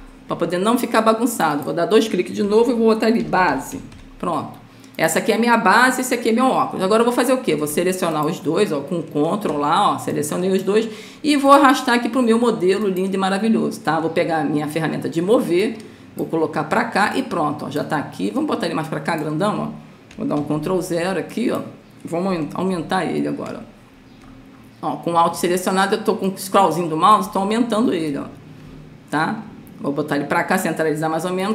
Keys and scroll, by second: 0.0-0.2 typing, 2.8 Caps_Lock, 2.9-4.4 typing, 20.8 ctrl+0, 23.1 ctrl+-.